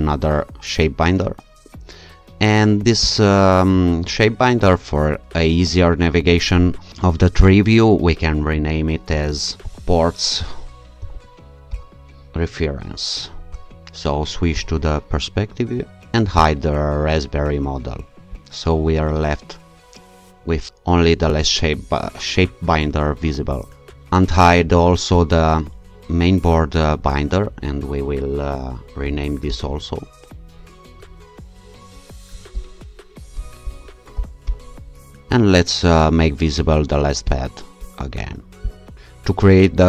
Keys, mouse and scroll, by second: 3.1 click, 9.1 F2, 9.6 shift+p, 10.7-11.8 typing, 13.7 shift+-, 14.5 0, 16.4 shift+click, 25.8 click, 29.5 F2, 30.2-35.2 typing, 37.3 click, 38.6 click.